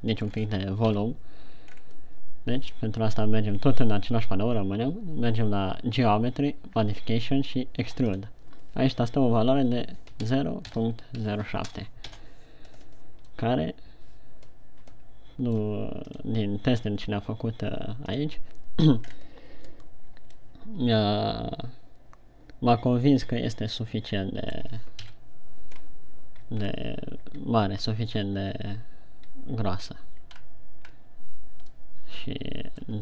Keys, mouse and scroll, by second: 0.7-1.1 scroll down 4, 1.4 KP_1, 2.1-2.6 scroll down 2, 8.6 click, 13.8 middle click, 19.5-20.7 scroll up 2, 20.7 middle click, 25.5 KP_1, 26.1-26.9 scroll down 2, 27.1 shift+scroll down 1, 30.9-32.4 shift+scroll down 3, 32.4 middle click.